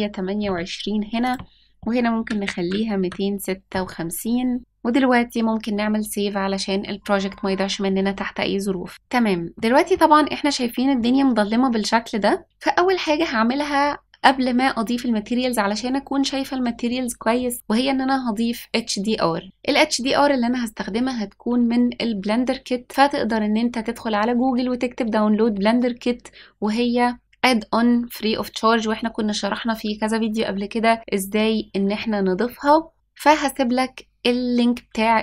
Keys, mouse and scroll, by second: 1.2-3.0 drag, 8.9 click, 9.5 middle click, 10.7-11.4 scroll down 3, 11.4-12.6 scroll up 2, 12.6-13.1 scroll up 1, 13.1 scroll up 1.